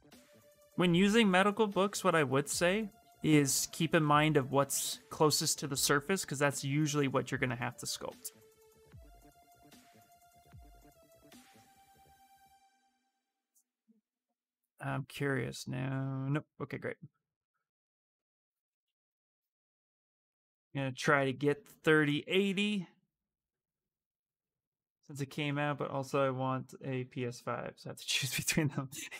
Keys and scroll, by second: 2.8 s, 11.9 x, 18.3 x, 23.1 ctrl+z, 23.5 s, 24.2 space, 24.9 space.